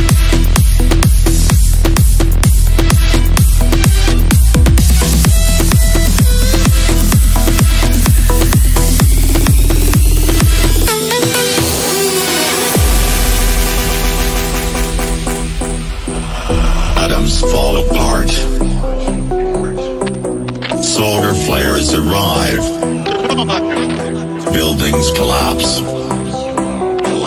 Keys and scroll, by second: 15.6 c, 16.9 ctrl+q.